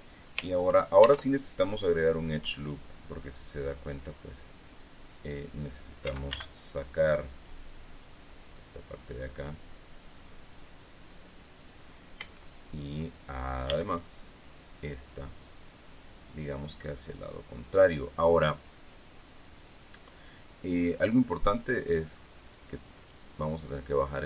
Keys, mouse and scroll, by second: 1.6 ctrl+r, 2.2 click, 4.5 click, 4.8 middle click, 6.6 a, 7.4 click, 8.2 middle click, 12.8 a, 14.2 b, 14.5 click, 15.3 middle click, 15.9-17.8 drag, 22.3-23.9 drag.